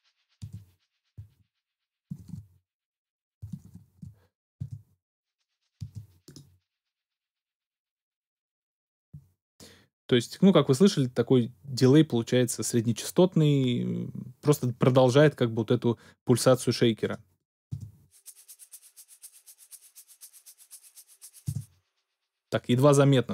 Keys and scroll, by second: 0.4 space, 1.4 super+z, 2.1 shift+super+z, 3.6 shift+super+z, 4.6 shift+super+space, 5.8 space, 17.7 space, 21.4 space.